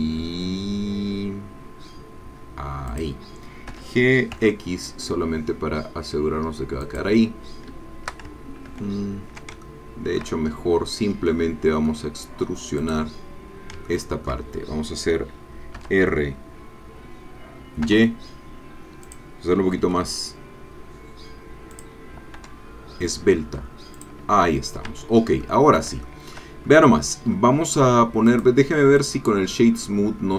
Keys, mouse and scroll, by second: 2.9 click, 3.7 g, 4.3 x, 6.8 click, 8.7 ctrl+z, 9.6 ctrl+shift+click, 11.3 click, 12.8 click, 13.9 shift+click, 15.7 r, 17.8 y, 19.0 click, 19.8 s, 21.8 click, 22.4 e, 23.9 click, 24.3-24.8 scroll down 1, 25.0 Tab, 25.4 middle click, 26.0 shift+middle click, 26.8-27.5 shift+scroll up 2, 28.3 middle click, 29.0 click, 30.0 scroll down 1.